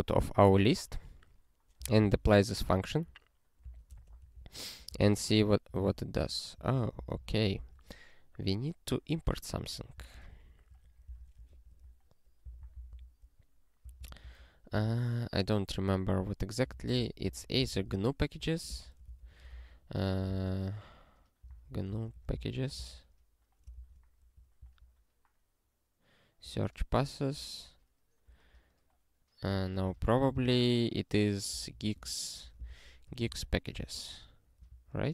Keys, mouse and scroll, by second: 0.5-3.3 typing, 3.8 Return, 4.4 ctrl+n, 5.0 ctrl+e, 5.7 ctrl+p, 6.1 ctrl+p, 6.5 ctrl+n, 6.7 ctrl+a, 7.0 Return, 7.2 ctrl+s, 7.5 alt+<, 9.6 click, 9.9 Return, 10.9 ctrl+p, 11.1 ctrl+k, 11.4 ctrl+n, 11.5 ctrl+y, 12.4 alt+b, 12.6 alt+b, 12.7 alt+b, 12.9 alt+b, 13.8 alt+d, 14.0 alt+d, 14.2 alt+d, 14.7 alt+d, 16.4-18.4 typing, 19.1 alt+x, 20.0 e, 21.1 Return, 23.7 alt+<, 24.6 ctrl+v, 26.4 ctrl+v, 27.3 ctrl+p, 29.4 super+w, 29.9 alt+x, 31.1 Return, 34.8 ctrl+v.